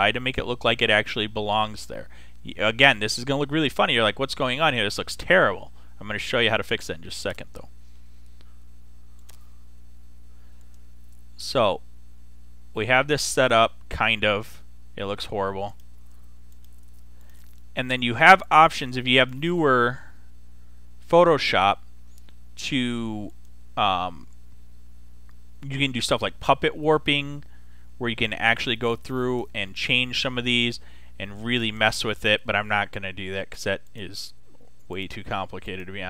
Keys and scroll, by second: 33.2 super+z.